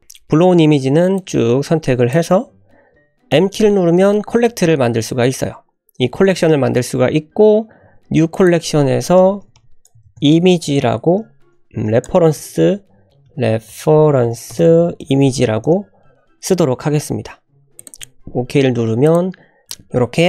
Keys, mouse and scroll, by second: 0.0 click, 1.1-2.2 drag, 3.9 m, 9.5 BackSpace, 19.0 click.